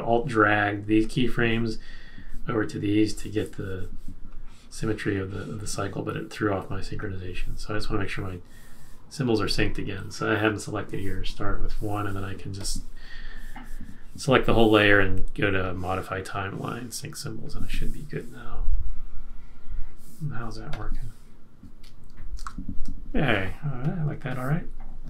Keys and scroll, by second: 22.4 super+-.